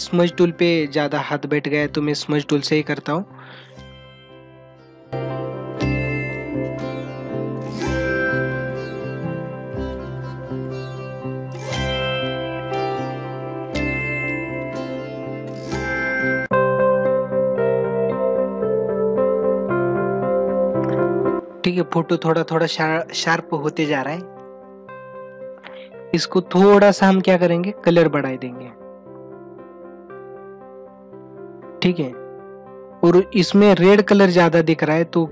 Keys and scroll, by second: 5.3 ctrl+alt+z, 5.6 ctrl+alt+z, 12.1 ctrl+=, 12.2 space, 12.7 ctrl+=, 16.0 ctrl+alt+z, 16.8 ctrl+alt+z, 18.9 ctrl+alt+z.